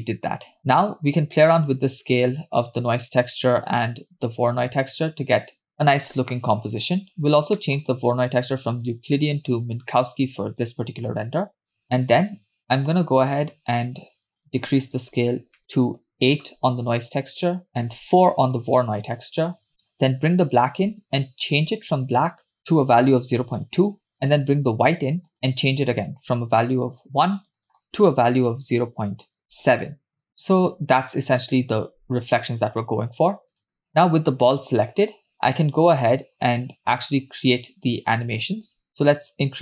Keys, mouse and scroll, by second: 0.6 middle click, 0.8-3.4 drag, 5.2-5.7 scroll down 2, 6.9-7.5 scroll up 1, 7.5 scroll up 2, 7.6 middle click, 8.8-9.8 drag, 14.2-16.1 drag, 17.4 click, 19.7-20.7 drag, 21.5 click, 24.5-25.3 drag, 26.0 click, 30.6 space, 31.5 space, 33.6 click, 34.9-35.3 scroll down 2, 35.3 middle click, 39.3-39.6 drag.